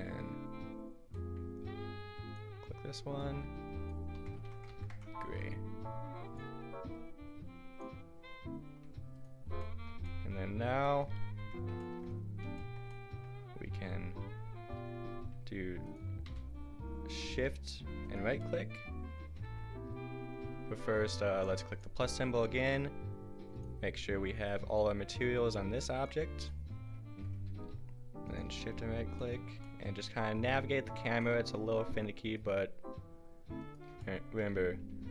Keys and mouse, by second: 2.4-3.2 drag, 11.4 Tab, 16.3 a, 17.8 middle click, 18.4-21.8 drag.